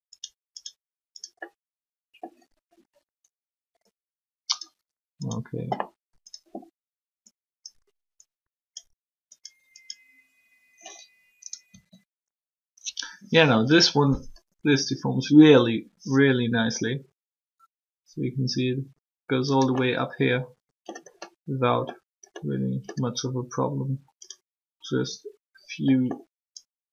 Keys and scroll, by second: 11.7 r.